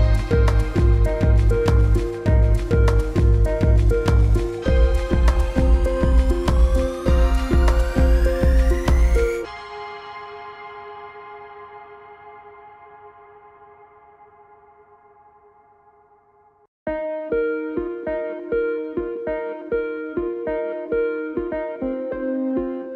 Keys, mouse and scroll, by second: 1.6-2.1 scroll down 1, 2.1-2.9 scroll up 1, 3.2-3.8 scroll down 1, 3.8 click, 7.1-8.4 typing, 9.1 alt+click, 10.5-11.8 typing, 12.4 click, 15.9-16.3 alt+scroll down 2, 16.3 space, 16.4 click, 16.5 space, 16.7 alt+scroll down 2, 16.9 click, 18.9 scroll up 1, 19.1 click, 19.5 scroll up 1, 19.7 click, 22.1 alt+scroll down 2, 22.3 click, 22.6 space, 22.9 alt+scroll up 2.